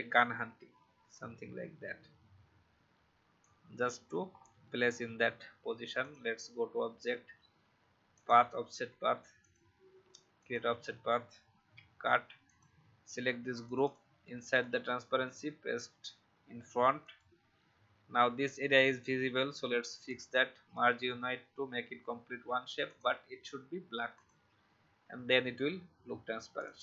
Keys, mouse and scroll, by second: 1.1-4.1 drag, 4.3-6.0 alt+scroll up 1, 6.0 click, 11.5 ctrl+x, 12.4-14.7 drag, 15.0 ctrl+f, 17.0 click.